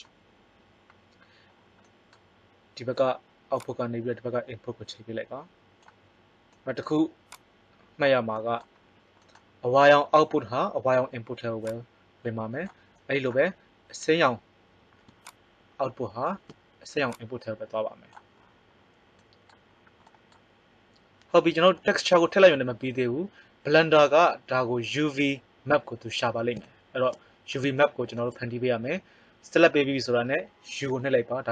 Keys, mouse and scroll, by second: 3.5-5.8 drag, 7.3-9.1 drag, 11.5-13.5 drag, 15.1-18.1 drag, 18.3 click, 26.5 middle click, 27.7-29.1 middle drag, 30.8 u.